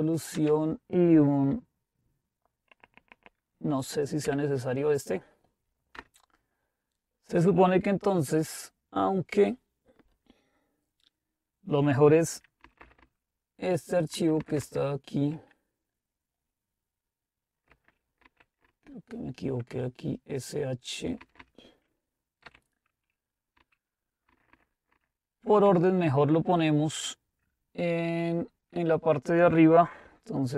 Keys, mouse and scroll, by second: 0.0-0.3 typing, 4.2 shift+7, 6.0 Return, 12.8 Up, 13.0 Up, 14.1 Down, 14.4 typing, 14.6 Down, 17.8 Delete, 18.2 Up, 18.7 Right, 19.2 Right, 19.3 Right, 19.4-20.9 Right, 21.2 Right, 21.4 Right, 22.4 h, 23.5 Down, 24.3 Up, 24.5 Up, 24.9 Up, 25.6 Up, 26.9 Right.